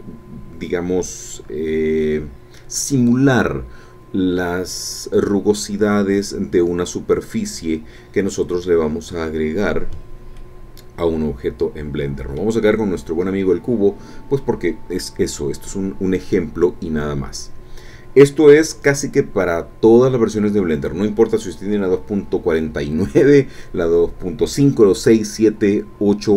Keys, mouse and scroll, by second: 10.4-12.6 drag, 12.8-13.1 scroll down 2.